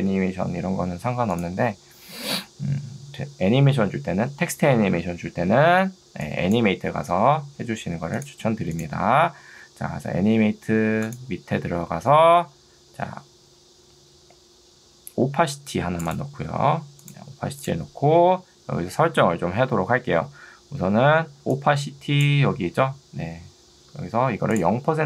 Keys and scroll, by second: 6.1 ctrl+2, 7.1 Escape, 21.3 ctrl+2, 23.9 Escape.